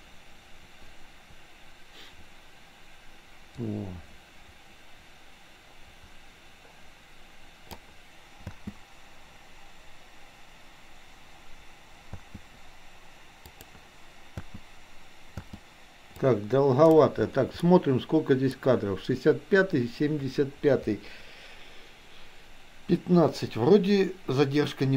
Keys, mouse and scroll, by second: 8.5 space, 12.2 space, 13.5 click, 16.2-17.0 drag, 17.7 middle click.